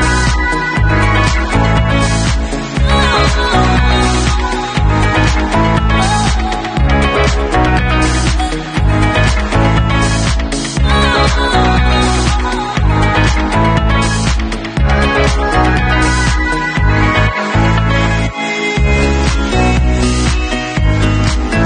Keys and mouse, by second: 2.6-12.6 middle drag, 8.9 ctrl+s, 12.6-13.9 drag, 13.9 middle click, 14.3-21.6 drag.